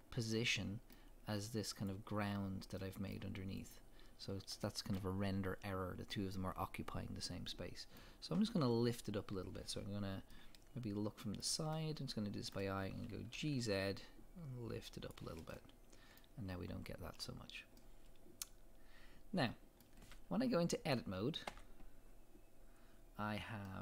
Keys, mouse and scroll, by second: 0.0 scroll down 1, 0.1-1.8 middle drag, 1.8 click, 2.8-3.6 middle drag, 3.6 click, 4.7-15.1 shift+middle drag, 5.3-6.1 scroll up 2, 6.1-6.7 scroll up 1, 13.3 g, 15.1 click, 15.5-18.3 middle drag, 16.3-16.7 scroll up 2, 17.2-17.8 scroll down 2, 18.3 middle click, 19.2-23.7 middle drag, 21.5 Tab.